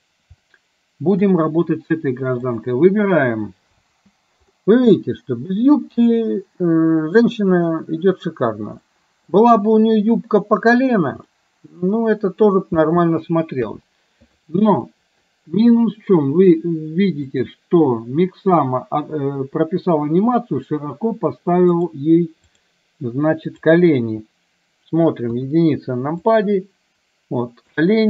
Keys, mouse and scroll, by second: 0.5-1.1 shift+middle drag, 2.5 click, 3.9 space, 4.6-7.3 middle drag, 9.0-9.4 middle drag, 11.4-12.5 middle drag, 12.9 space, 13.6 KP_1, 14.9-16.6 middle drag, 17.5 click, 21.9-22.8 drag, 25.4 KP_1, 26.5-27.8 drag.